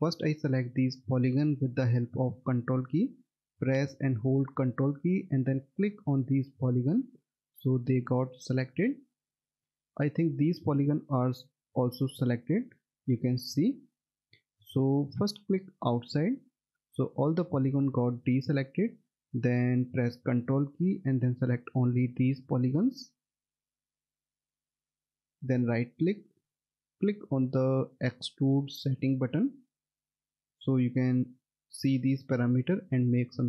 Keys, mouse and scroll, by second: 5.3 ctrl+click, 6.2 ctrl+click, 7.0 ctrl+click, 8.2 ctrl+click, 9.3 ctrl+double click, 12.6 middle click, 13.0-13.6 scroll down 1, 13.7 middle click, 15.8 click, 16.4 middle click, 17.3-19.7 scroll up 1, 21.0 ctrl+click, 21.8 ctrl+click, 22.5 ctrl+click, 23.6 ctrl+click, 24.7 ctrl+click, 25.6 right click, 29.7 click.